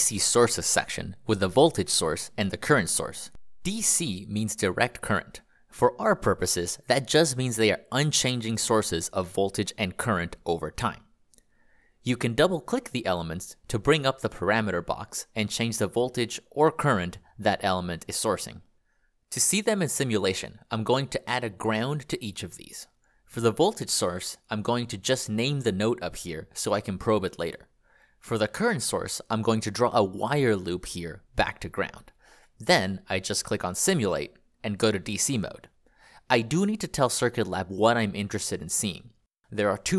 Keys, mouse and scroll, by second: 1.3 click, 3.7 ctrl+click, 7.8 click, 13.2 5, 14.1 Return, 16.8 5, 17.3 Return, 18.5 click, 19.4 click, 20.0 g, 21.1 click, 21.8 g, 22.9 click, 24.2 n, 25.0 click, 25.9 click, 31.2 click.